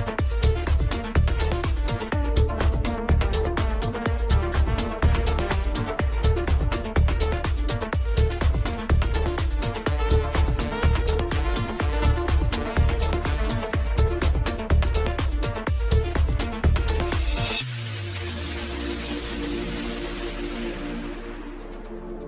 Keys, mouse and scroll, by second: 0.1 scroll up 1, 1.0 alt+shift+click, 1.3 scroll up 1, 1.4 middle click, 1.8 scroll down 2, 2.0 ctrl+z, 2.4 alt+shift+click, 2.8 scroll down 1, 3.0 middle click, 3.9 scroll up 1, 4.2 shift+middle click, 5.1-5.4 scroll up 2, 5.4 middle click, 6.0 alt+shift+click, 6.8 alt+shift+click, 7.7 scroll down 1, 7.8 middle click, 8.8-9.7 scroll up 3, 9.0 middle click, 9.7 alt+shift+click, 10.1 alt+shift+click, 10.7 scroll down 2, 10.9 shift+middle click, 11.5 scroll up 3, 11.7 shift+middle click, 12.6 scroll up 1, 13.7 alt+shift+click, 13.9 alt+shift+click, 14.1 scroll down 2, 14.3 shift+middle click, 14.9 scroll up 3, 15.1 shift+middle click, 16.0 alt+shift+click, 16.7 alt+shift+click, 16.9 scroll down 1, 17.0 middle click, 17.9 scroll up 1, 18.5-20.1 middle drag, 20.5 alt+shift+click, 21.5 alt+shift+click.